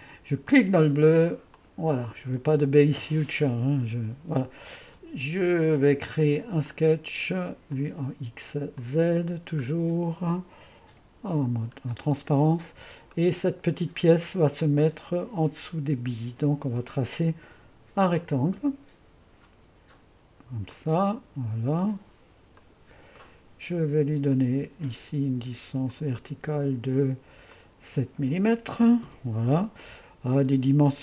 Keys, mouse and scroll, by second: 1.6-4.2 drag, 8.0 click, 9.0 click, 9.7-11.0 scroll up 1, 11.0 2, 12.0-12.4 scroll up 1, 12.4 click, 12.7 middle click, 13.2 click, 14.8-17.9 drag, 18.1 click, 20.8 click, 22.6 click, 23.3 middle click, 24.4 click, 26.0-28.8 drag, 28.5-29.3 typing.